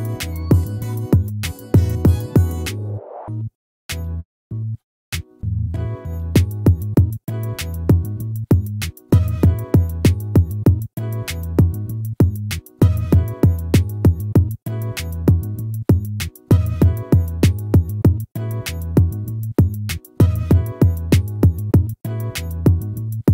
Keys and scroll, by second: 0.4 ctrl+-, 2.7 ctrl++, 7.0 ctrl++, 21.5 ctrl+-.